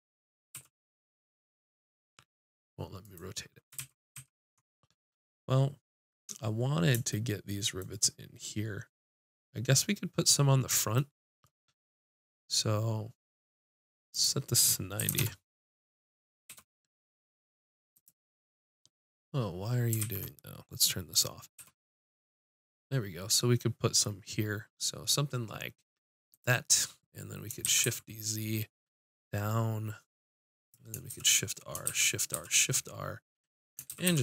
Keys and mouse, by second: 0.5 r, 3.8 ctrl+z, 4.2 ctrl+z, 14.1-16.5 drag, 16.5 g, 18.4-19.7 drag, 20.0 ctrl+z, 21.6 g, 27.5 click, 27.6 shift+d, 30.7-32.3 drag, 31.1 shift+r, 31.9 shift+r, 32.3 shift+r, 33.9 shift+r, 34.1 shift+r.